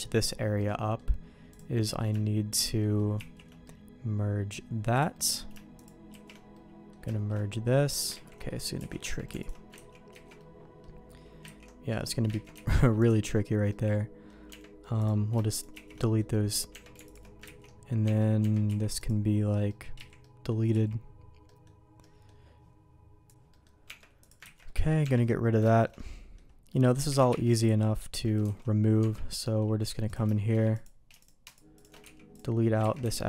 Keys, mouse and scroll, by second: 0.5 middle click, 1.5 click, 1.7 middle click, 2.5 shift+click, 2.8 shift+middle click, 3.1 shift+1, 3.6 middle click, 4.9 click, 5.1 middle click, 5.7 shift+click, 6.1 shift+1, 6.5 middle click, 7.0 middle click, 7.6 middle click, 8.1 ctrl+z, 8.4 middle click, 8.7 alt+a, 9.0 Tab, 9.4 alt+click, 9.7 ctrl+x, 10.1 ctrl+z, 10.3 middle click, 11.6 ctrl+x, 11.9 middle click, 12.4 ctrl+z, 12.5 x, 13.6 middle click, 14.4 Tab, 14.9 click, 15.5 shift+click, 15.9 shift+1, 16.0 middle click, 16.7 Tab, 17.0 alt+click, 17.6 ctrl+x, 18.0 Tab, 18.4 Tab, 18.6 x, 19.6 middle click, 19.9 z, 20.2 middle click, 20.7 z, 23.3 z, 23.5 middle click, 23.8 Tab, 24.2 click, 24.4 ctrl+x, 24.6 middle click, 25.0 Tab, 25.2 middle click, 25.6 shift+middle click, 25.9 middle click, 26.6 middle click, 27.0 a, 27.3 3, 27.9 middle click, 28.5 alt+a, 29.0 Tab, 29.4 middle click, 30.0 alt+click, 30.8 alt+click, 31.4 alt+shift+click, 32.0 x, 32.9 ctrl+z.